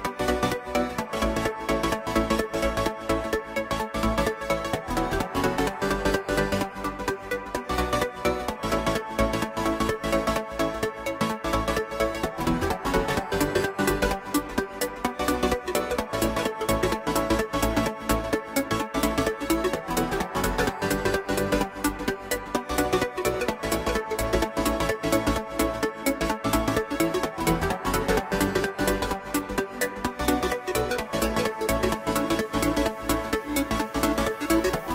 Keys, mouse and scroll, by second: 2.0-3.1 middle drag, 3.1-5.4 drag, 8.2-8.8 drag, 9.7-11.0 middle drag, 21.6-25.6 middle drag, 25.6 click, 26.0 click, 26.3 scroll up 2, 26.5-27.1 shift+middle drag, 27.1 click, 29.1 ctrl+a, 29.3-30.1 scroll up 1, 30.1 Tab, 30.4 a, 30.7-31.5 scroll down 1, 31.5 ctrl+b.